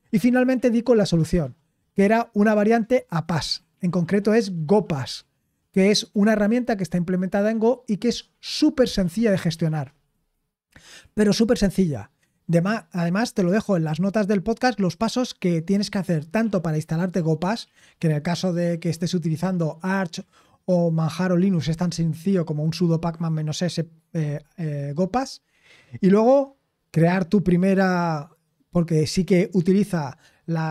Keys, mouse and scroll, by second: 12.2-22.6 scroll down 4, 25.0-30.7 scroll down 2.